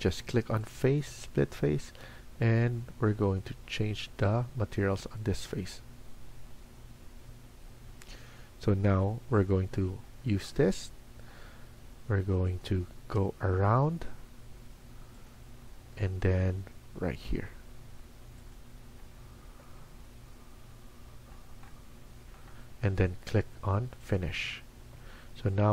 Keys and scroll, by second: 19.3 Escape, 19.6 Escape.